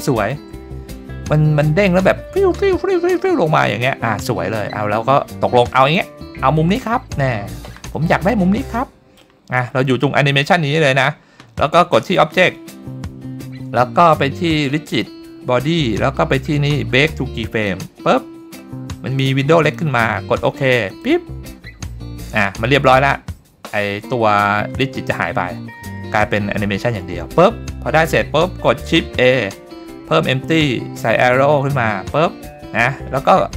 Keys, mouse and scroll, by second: 0.5-1.8 scroll up 2, 1.8 click, 3.4 scroll up 2, 4.2 shift+middle drag, 4.8-5.6 scroll down 1, 5.6-6.2 scroll down 1, 6.2-6.8 scroll down 1, 7.9-9.2 drag, 11.7 click, 29.1 shift+a, 32.8-33.5 scroll up 2.